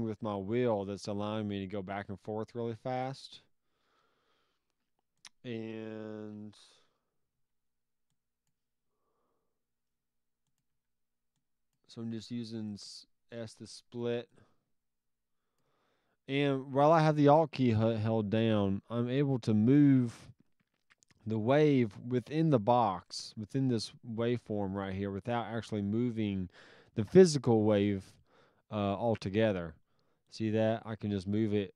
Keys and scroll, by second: 7.3 s, 10.7 s, 12.9 s.